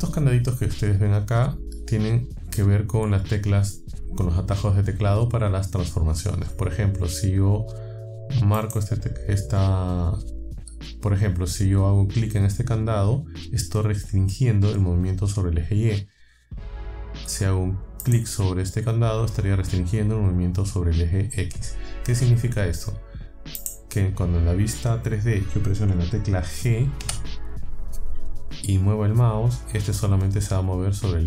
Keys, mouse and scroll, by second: 8.6 click, 18.0 click, 23.6 click, 27.0 g.